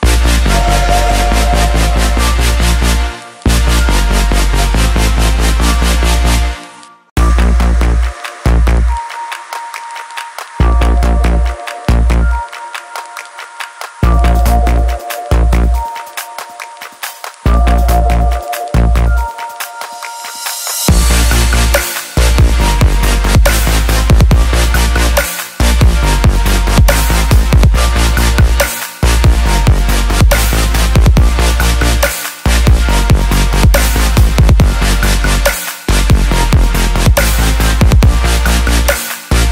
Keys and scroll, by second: 8.4 ctrl+t, 31.0 ctrl+t.